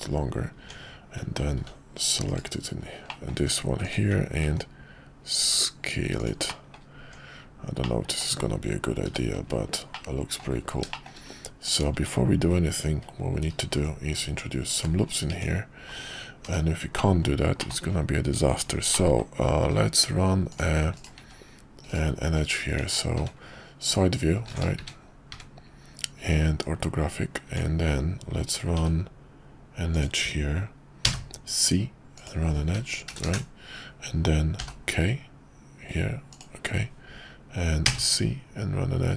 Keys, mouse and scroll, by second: 0.5 Tab, 1.5 ctrl+r, 3.1 middle click, 3.5 Tab, 3.9 click, 4.4 s, 6.4 middle click, 7.0 Tab, 7.8-8.3 middle drag, 9.1 h, 9.9-10.4 middle drag, 10.9 shift+middle click, 11.7 click, 11.9 Tab, 13.6 ctrl+r, 15.3 Tab, 16.4 /, 17.6 middle click, 18.9 middle click, 19.6 k, 21.9 right click, 22.8 Tab, 24.8 `, 25.3 `, 26.4 KP_5, 27.4 Tab, 28.7 k, 33.2 Return, 34.6 k.